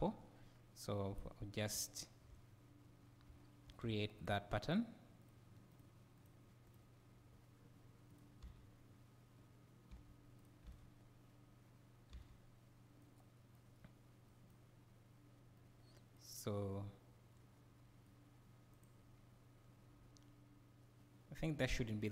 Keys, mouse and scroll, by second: 8.1-8.4 right drag, 8.4 space, 9.9 space, 10.4 right click, 10.7 space, 12.2 space, 13.1-18.7 right drag, 18.7 click, 21.6 g.